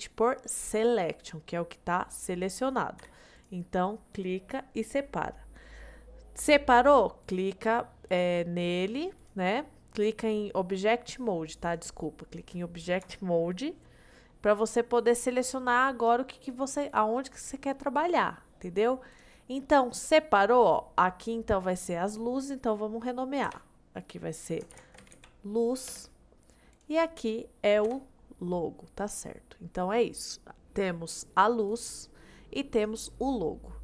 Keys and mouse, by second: 3.0 p, 5.4 middle click, 7.2 click, 8.2-11.8 drag, 13.1 Tab, 19.2 click, 20.1-20.9 middle drag, 21.1-22.0 middle drag, 22.3 middle click, 23.5 F2, 27.9 F2.